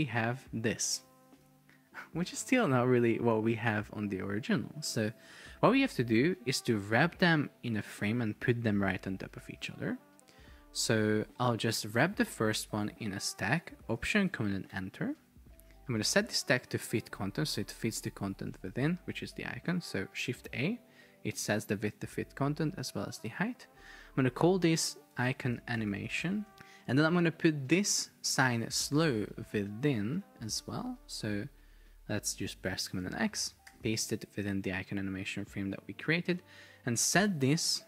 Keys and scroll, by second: 1.5 super+r, 3.9 Escape, 14.8 alt+super+Return, 20.3 shift+a, 25.2 shift+i, 25.8 shift+a, 26.5 Return, 30.5 super+x, 33.9 super+v.